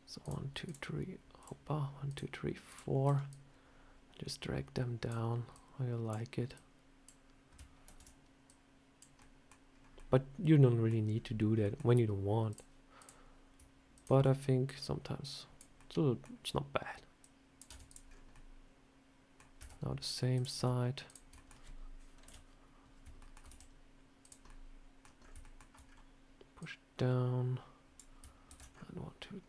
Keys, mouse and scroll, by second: 3.1 click, 5.4 click, 6.4 click, 7.7 ctrl+z, 8.3 click, 9.0 middle click, 9.6 scroll down 2, 9.8 middle click, 11.0 scroll up 2, 11.5 middle click, 12.3 click, 12.8 click, 13.8 shift+click, 13.9 shift+click, 14.5 click, 15.6 middle click, 17.1 click, 17.6 Tab, 17.7 click, 17.9 scroll down 3, 18.2 middle click, 19.5 Tab, 20.2 click, 20.9 shift+click, 21.2 middle click, 22.1 KP_7, 23.1 shift+middle click, 23.3 e, 24.3 middle click, 25.1 scroll up 3, 25.3 shift+middle click, 25.7 scroll down 3, 26.5 click, 28.3 ctrl+r.